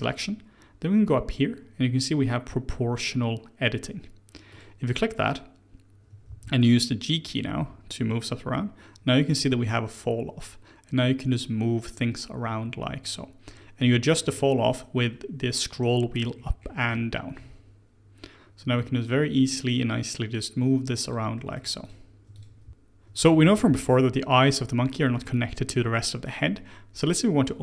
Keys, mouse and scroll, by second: 4.5 click, 6.2 g, 21.3 middle click, 21.8 click, 22.3 click, 22.6 g, 25.0-27.6 middle drag.